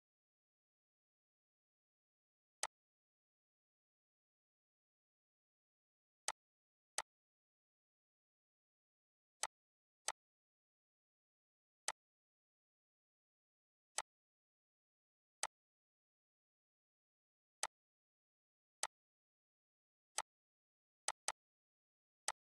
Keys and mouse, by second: 2.2-8.7 drag, 9.0 click, 17.2-18.5 drag.